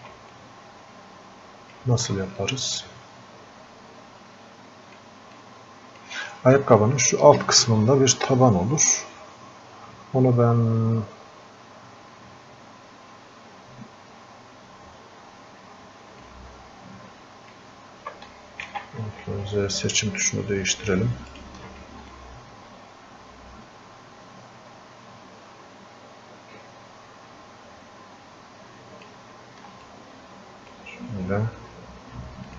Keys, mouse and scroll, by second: 0.4-5.4 drag, 5.4-8.5 drag, 16.3-18.7 ctrl+shift+drag, 18.7 ctrl+z, 19.9-29.9 ctrl+shift+drag, 29.9-32.5 drag.